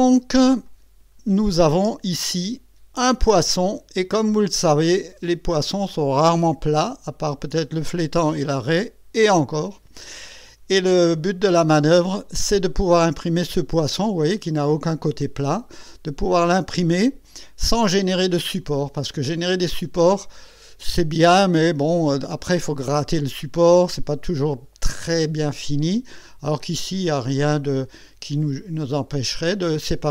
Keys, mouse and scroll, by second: 0.7 click, 1.7 click, 3.5 click, 4.5 scroll up 1, 5.0 scroll down 1, 5.6-10.7 drag, 11.2-15.7 drag, 15.8-18.7 drag, 19.5-22.7 drag, 23.4-24.4 drag, 25.0-26.9 drag.